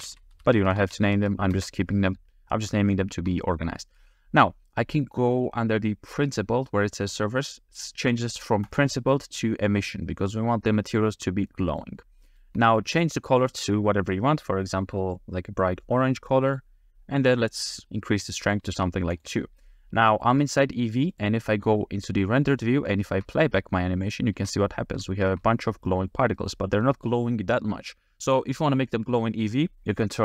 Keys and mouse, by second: 2.9 shift+middle click, 8.8-11.0 drag, 11.5 middle click, 12.2 shift+middle click, 13.3 click, 18.5 click, 20.1 shift+middle click, 21.2 click, 22.6 click, 23.0 shift+middle click, 24.1 click, 24.4 space, 25.1 shift+middle drag, 25.9 click, 25.9 middle click.